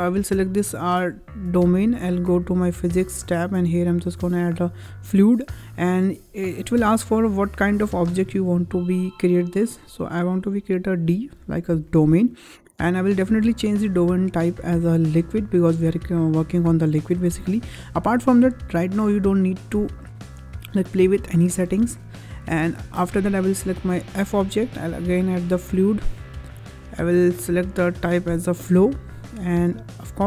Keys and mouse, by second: 1.5 click, 2.3 click, 2.5 click, 4.4 click, 9.6-11.0 drag, 14.2-15.3 drag, 24.7 click, 26.6-28.5 drag.